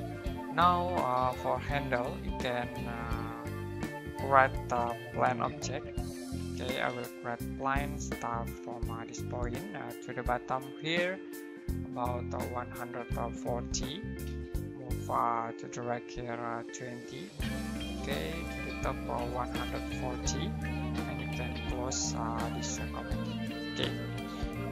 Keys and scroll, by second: 5.0-6.1 typing, 12.3-14.2 typing, 17.0-18.0 typing, 19.1-21.9 typing, 23.2 space.